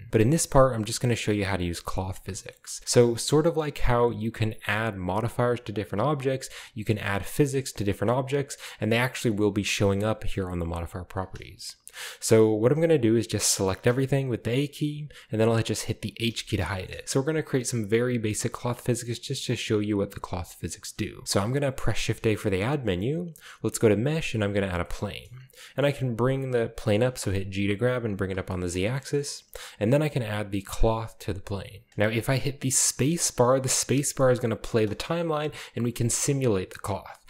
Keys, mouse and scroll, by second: 2.4 shift+middle click, 11.9-12.8 shift+middle drag, 12.3-13.0 shift+scroll down 2, 13.9 a, 16.3 h, 16.9 shift+middle drag, 19.5-20.6 shift+middle drag, 22.0 shift+a, 24.5 drag, 24.8-25.3 shift+drag, 25.0-26.6 middle drag, 25.3-26.0 scroll down 2, 26.9 g, 27.6 z, 28.2 click, 28.5-29.3 shift+middle drag, 30.7 click, 31.9 shift+middle click, 34.9 space, 36.1 space, 36.3 scroll down 1, 36.9 click.